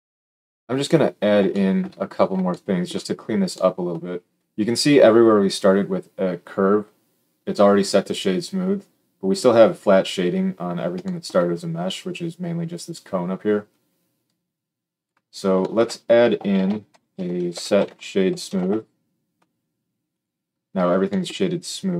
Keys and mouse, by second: 0.0-20.2 shift+drag, 16.5 shift+a, 17.1 s, 20.2-21.9 middle drag, 21.9 click.